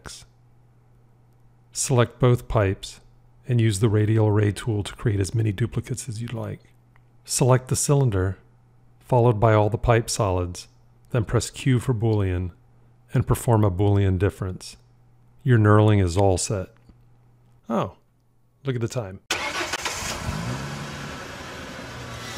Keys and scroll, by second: 11.6 q.